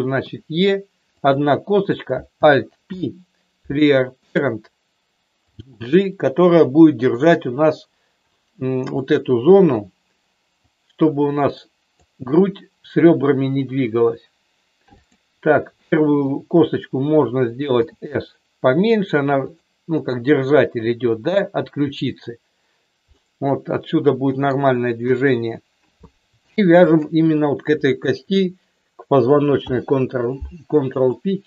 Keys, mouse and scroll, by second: 0.3 e, 1.1 click, 1.7 click, 2.8 alt+p, 5.5 g, 9.0 middle click, 10.5-12.0 drag, 15.7 shift+middle click, 17.8 s, 19.3 click, 23.2-24.6 middle drag, 25.0 KP_1, 27.0 shift+click, 29.6 ctrl+p.